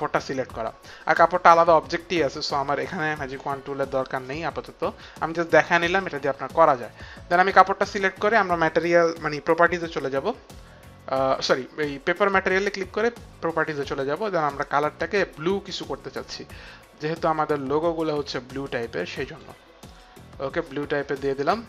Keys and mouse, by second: 4.3 click, 12.1 click, 14.3 click, 15.8 click, 19.9 click.